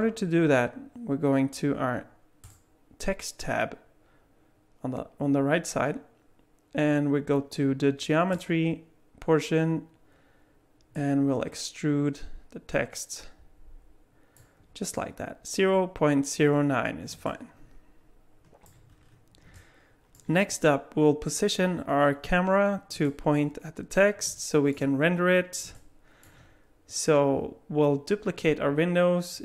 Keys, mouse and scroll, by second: 2.4 click, 8.3 click, 11.0 click, 17.2 middle click, 18.8-19.4 scroll down 7, 19.6 middle click, 20.3-22.1 scroll up 2, 23.0 middle click, 25.8 middle click.